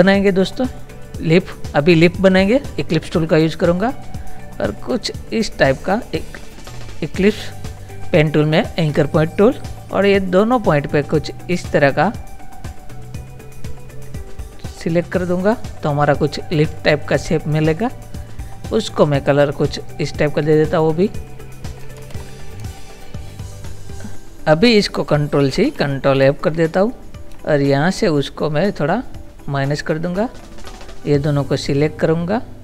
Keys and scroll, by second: 22.0 ctrl++, 22.6 space, 25.4 ctrl+c, 26.2 ctrl+f.